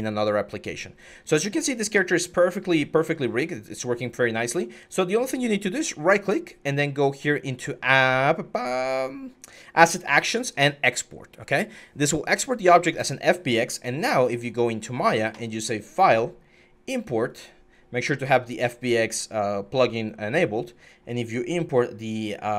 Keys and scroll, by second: 1.7 ctrl+z, 13.5 alt+Tab, 14.4 alt+Tab.